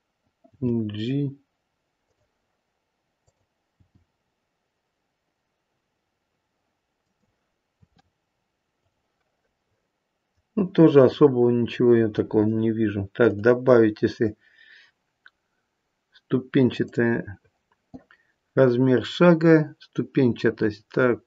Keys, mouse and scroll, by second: 0.4 g, 3.2 click, 3.7 g, 7.7 r, 9.5 middle click, 13.2 click.